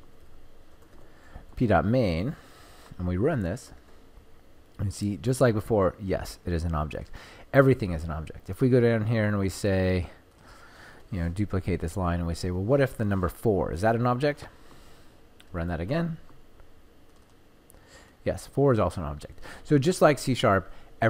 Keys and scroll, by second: 3.4 ctrl+F5, 10.9 ctrl+d, 12.1 ctrl+shift+Left.